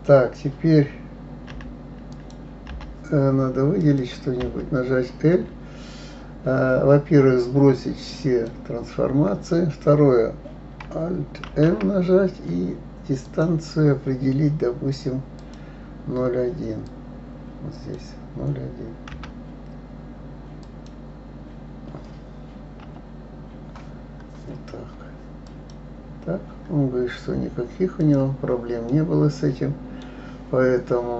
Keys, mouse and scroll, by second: 1.5 l, 2.1 click, 2.7 l, 3.8 click, 4.4 l, 8.2 click, 11.5 alt+m, 15.4-18.4 drag, 28.0 click, 28.9-31.1 middle drag.